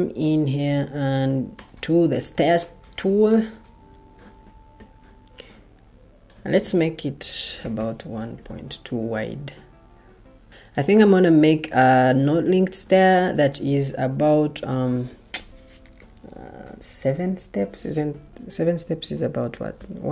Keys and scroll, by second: 6.7-8.2 typing, 19.4-20.1 typing.